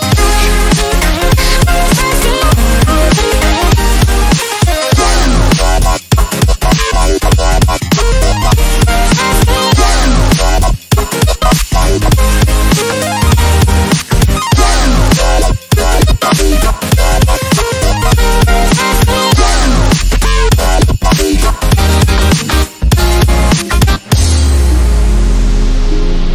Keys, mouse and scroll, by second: 0.4 click, 2.3 click, 8.9 click, 11.1 click, 14.3-15.2 click, 17.0-17.6 drag, 20.0 click, 25.4 click.